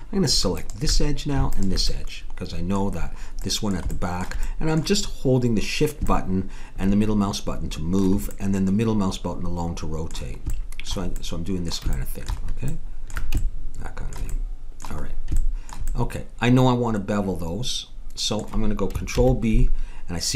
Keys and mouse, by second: 1.1 click, 1.9 middle click, 2.5 click, 3.4 right click, 4.1 middle click, 7.8-9.9 middle drag, 16.2 middle click, 19.2 ctrl+b.